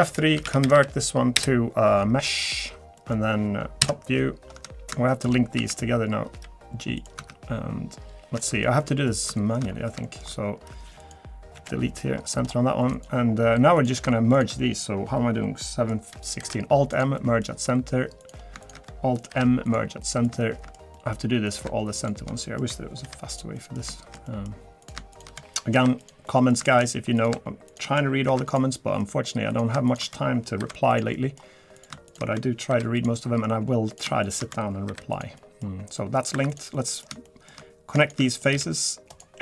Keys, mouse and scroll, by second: 3.0 middle click, 3.8 KP_8, 3.8 KP_7, 4.6 scroll up 3, 5.1 shift+middle click, 5.6 a, 6.3 g, 7.2 Tab, 7.4 scroll up 3, 7.6 scroll down 2, 8.0-8.3 scroll up 2, 8.4 shift+middle click, 8.8 middle click, 9.1 scroll up 1, 9.3 shift+middle click, 9.6-9.9 scroll up 4, 10.0 shift+middle click, 11.0 click, 11.5 KP_Decimal, 11.8-12.8 scroll down 15, 12.9 click, 13.3-13.8 scroll up 4, 13.8 click, 14.3 shift+click, 14.6 middle click, 15.6 middle click, 16.4 alt+m, 17.2 middle click, 17.7-18.0 scroll up 2, 18.2 click, 18.6 shift+click, 19.3 alt+m, 20.0 middle click, 20.4 shift+middle click, 20.9 middle click, 21.5 click, 22.0 shift+click, 22.4 middle click, 23.0 alt+m, 23.5 middle click, 23.9 shift+middle click, 24.2 middle click, 24.8 click, 25.1 shift+click, 25.7 alt+m, 26.3 middle click, 26.7 shift+middle click, 27.2 click, 27.7 shift+click, 28.3 alt+m, 28.7 middle click, 29.5 click, 29.9 shift+click, 30.6 alt+m, 31.1 middle click, 31.7 click, 32.1 shift+click, 32.7 alt+m, 33.2 middle click, 33.5 scroll up 1, 33.9 click, 34.2 shift+click, 34.9 alt+m, 35.4 middle click, 36.0 middle click, 36.3 2, 36.5 click, 36.7 middle click, 37.2 shift+middle click, 38.0 shift+click, 38.2 middle click.